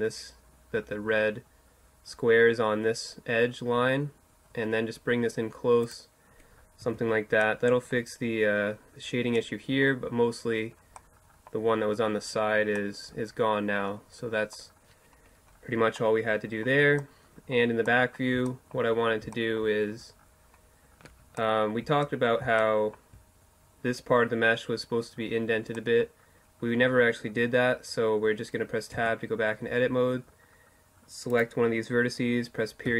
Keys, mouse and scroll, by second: 5.6-7.3 middle drag, 5.9 Tab, 20.4-21.8 middle drag, 28.0 Tab, 30.3-32.1 right drag, 31.9 KP_Decimal, 32.1 middle click.